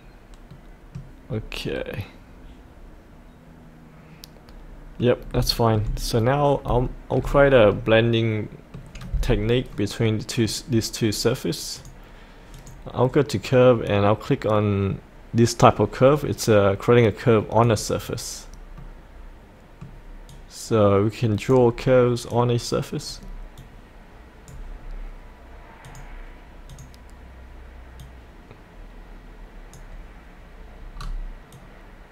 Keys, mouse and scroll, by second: 0.5 middle click, 1.3 scroll down 1, 1.7-5.0 middle drag, 5.0 scroll up 1, 5.5 shift+middle click, 6.2 scroll down 1, 6.8 shift+middle click, 7.7-9.0 middle drag, 9.2-9.7 scroll up 1, 9.7-11.1 middle drag, 11.8 click, 18.8-20.2 middle drag, 20.2 middle click, 20.3-24.8 drag, 24.8 scroll down 1, 25.9-29.3 drag, 29.3 click, 31.0-31.5 scroll down 1, 31.5 click.